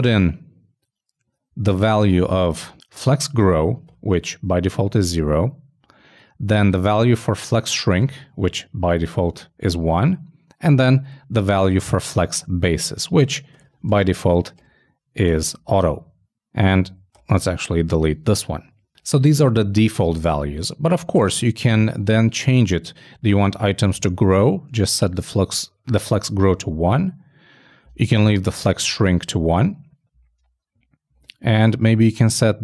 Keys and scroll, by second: 17.0 shift+super+Down, 17.3 shift+BackSpace, 23.3 shift+Left, 24.0 shift+|, 30.9 shift+Right.